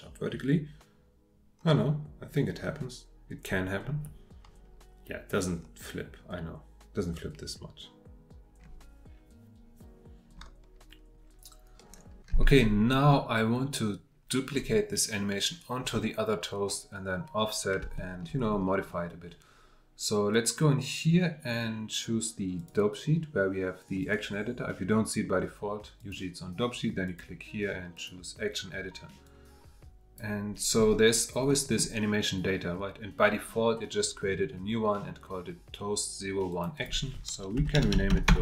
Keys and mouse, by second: 13.1-14.5 middle drag, 17.9 shift+middle drag, 29.5-30.7 drag, 31.5-37.7 drag, 37.7 BackSpace.